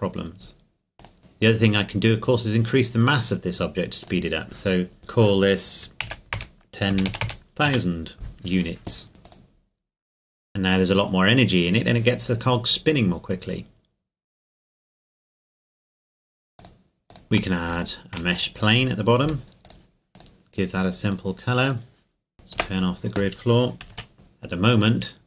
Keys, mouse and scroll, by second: 1.0 click, 6.0 KP_1, 6.3 KP_0, 7.6 KP_Enter, 9.2 click, 16.6 click, 17.2 shift+a, 18.6 click, 19.2 s, 19.6 click, 22.6 n, 23.9 KP_5, 24.1 click.